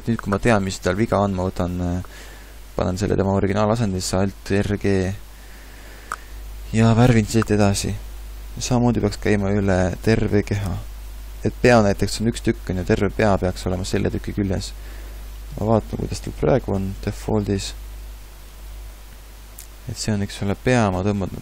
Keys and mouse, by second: 3.1 alt+r, 3.4 alt+g, 9.4-15.7 middle drag.